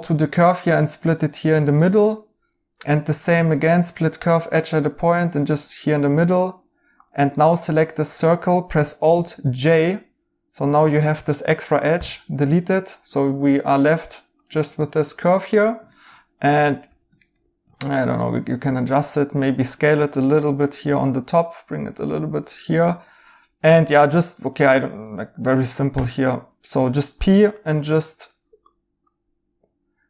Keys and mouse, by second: 1.7 right click, 7.3 right click, 9.1 alt+j, 11.9 x, 14.8 right click, 16.8 s, 17.1 right click, 20.8 g, 25.9 p.